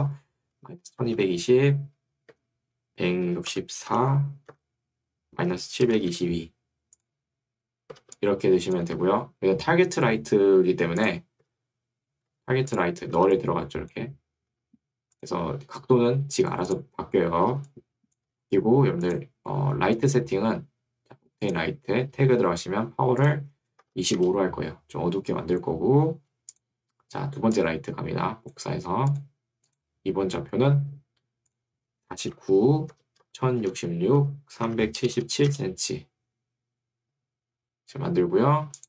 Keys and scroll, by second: 0.7 1, 1.1 0, 2.3 Tab, 3.6 6, 4.7 Tab, 6.4 2, 8.1 2, 8.9 Escape, 12.3 Escape, 13.3 2, 14.5 Escape, 18.3 Escape, 23.9 5, 24.3 Return, 32.3 9, 32.9 Tab, 33.3 0, 35.5 Return.